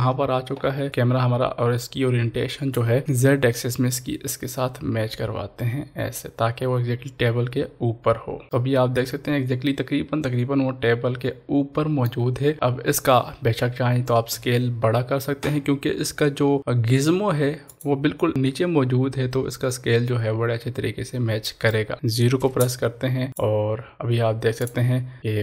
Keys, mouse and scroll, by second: 0.0-0.6 scroll down 1, 0.7 scroll up 1, 1.1-3.0 drag, 3.7 click, 3.9-8.6 shift+drag, 8.6-12.5 middle drag, 12.5-14.3 scroll down 1, 14.3 s, 17.7 s, 17.8 click, 18.3-23.3 middle drag, 23.3 click.